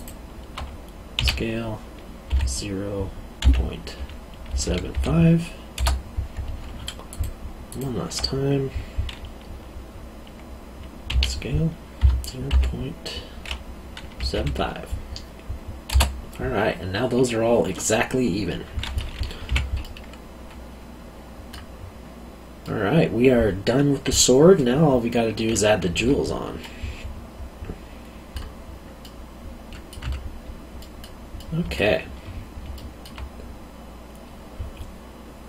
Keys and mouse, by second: 1.1 s, 2.3 0, 3.4 ., 4.5 7, 4.9 5, 7.1 click, 11.1-11.9 typing, 14.1 typing, 17.8 middle click, 19.5 q, 19.8 middle click, 22.6 middle click, 26.0 Tab, 26.6 middle click, 29.0 middle click, 30.0 Tab, 30.8 middle click, 32.7 alt+middle click.